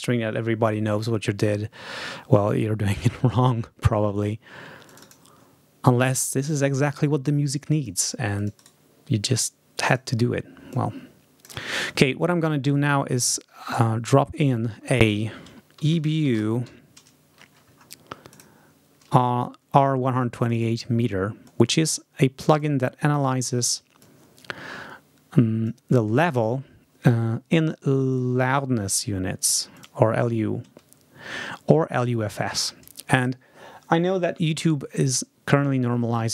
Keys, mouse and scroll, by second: 4.8 click, 6.0-8.2 drag, 7.9 right click, 8.3 click, 8.5 right click, 9.8 click, 10.6 click, 12.6 right click, 14.3 click, 15.7 shift+e, 16.1 shift+b, 18.2 click, 20.3 click, 21.4 click, 22.4 click, 23.9-25.8 drag, 28.0 right click, 29.7 click.